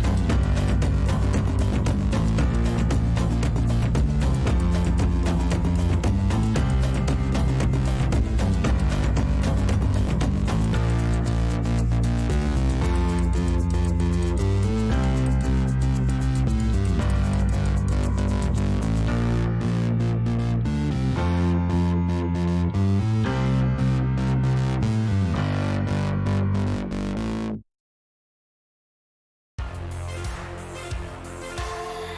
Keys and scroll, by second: 1.6 Return, 3.4-9.1 typing, 9.1 Return, 15.7-20.4 typing.